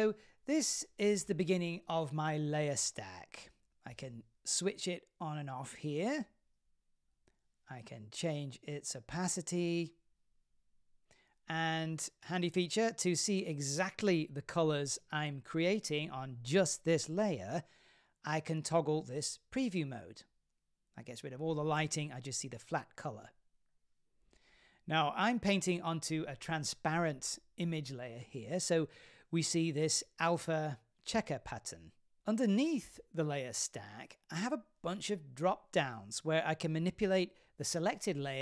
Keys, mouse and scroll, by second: 0.0 shift+middle click, 0.8-1.6 scroll down 1, 1.6 scroll down 1, 1.7 shift+middle click, 3.2 click, 5.0 click, 6.1 click, 8.7-9.8 scroll up 2, 9.8 scroll up 1, 9.9-14.1 shift+drag, 10.3 w, 15.2-16.8 middle drag, 19.7 click, 20.6-21.9 middle drag, 22.2-23.0 scroll up 10, 23.0-24.1 scroll down 6, 24.1-24.6 scroll down 1, 24.6-24.9 scroll down 3, 24.9-27.0 middle drag, 26.2 w, 27.1-28.4 scroll up 5, 28.4-29.0 scroll up 1, 29.0-30.8 scroll down 5, 31.4-33.1 scroll up 1, 33.4 click, 34.2 scroll down 3, 35.7 w, 35.9 click, 37.1 click.